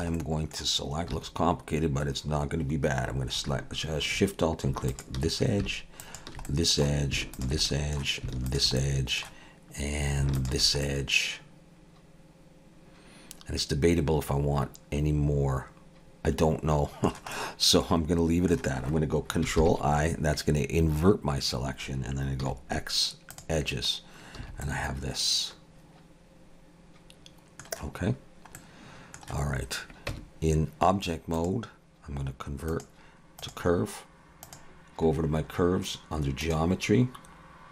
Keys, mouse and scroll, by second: 0.2 middle click, 1.1 2, 4.9 alt+shift+click, 6.4 alt+shift+click, 6.5 middle click, 7.4 alt+shift+click, 7.7 middle click, 8.5 alt+shift+click, 8.8 middle click, 10.4 alt+shift+click, 10.9 middle click, 17.3 middle click, 19.6 ctrl+i, 22.4 x, 24.4 a, 24.7 middle click, 28.6 middle click, 30.1 Tab, 31.4 click, 35.1 click, 35.1-36.4 scroll down 8, 36.4 click.